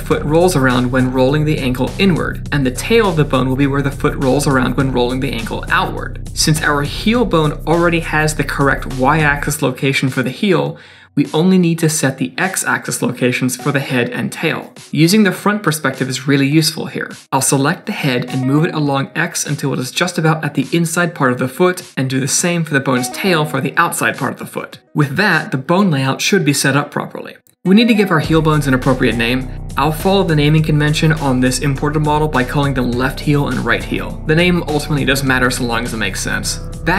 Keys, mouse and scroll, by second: 0.4 g, 3.6 click, 4.3 g, 6.8 middle click, 14.2 KP_2, 15.3 KP_1, 16.3-16.8 scroll up 2, 17.1 shift+middle click, 18.6 g, 19.9-20.9 scroll up 6, 20.1 shift+middle click, 20.5 shift+middle click, 21.0 g, 21.8 scroll down 4, 22.0 shift+middle click, 22.7 click, 22.9-23.3 scroll up 4, 23.3 shift+middle click, 23.6 g, 24.7 middle click, 24.8 scroll down 2, 25.1 middle click, 26.6-26.9 scroll up 3, 27.1 middle click, 27.6 click, 28.4 click, 29.9 BackSpace, 31.1 e, 32.6 click, 33.7 click, 35.2 e, 36.6 scroll down 2.